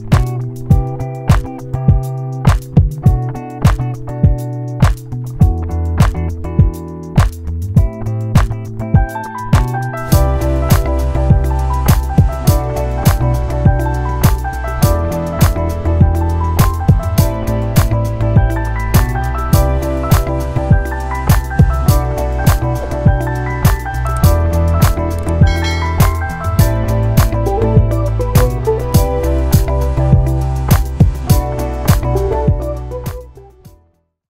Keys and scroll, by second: 17.9 ctrl+0.